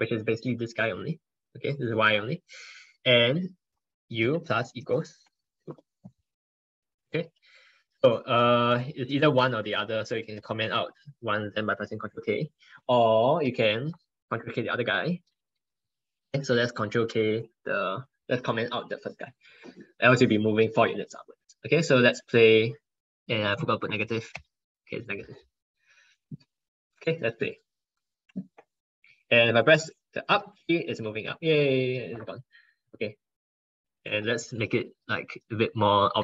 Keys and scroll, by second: 10.2 ctrl+k, 13.6 ctrl+k, 14.2 ctrl+k, 15.0 ctrl+k, 16.1 ctrl+k.